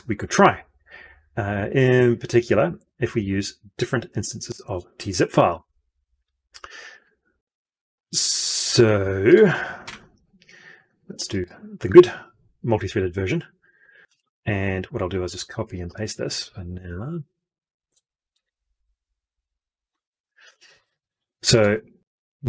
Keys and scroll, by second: 9.7 F12, 18.2 ctrl+c, 19.8 ctrl+v.